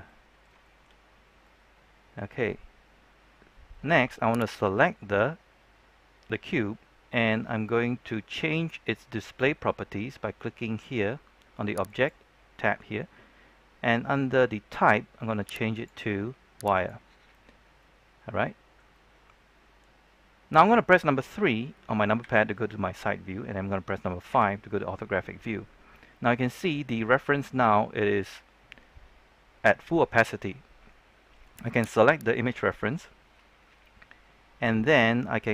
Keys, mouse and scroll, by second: 0.0 middle click, 0.5 shift+middle click, 0.9-1.4 scroll up 1, 1.4-2.4 middle drag, 4.3 right click, 11.8 click, 17.7-20.7 middle drag, 22.2 KP_3, 26.3 KP_5, 26.4-32.1 scroll up 1, 32.1 right click.